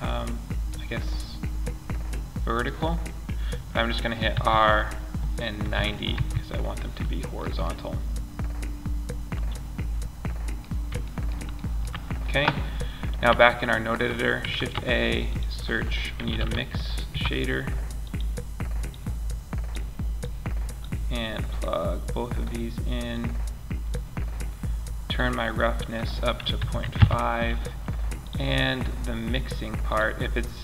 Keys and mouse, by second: 3.6 r, 9.1 middle click, 13.8 shift+a, 17.4-18.2 drag, 26.3-27.6 middle drag, 29.5 middle click, 30.1 click.